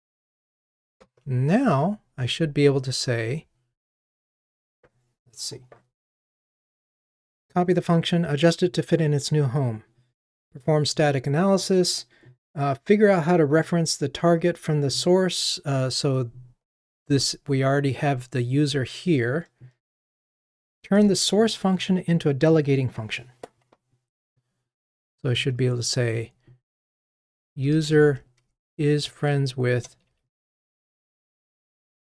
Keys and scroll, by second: 1.0 ctrl+Tab, 29.8 Return.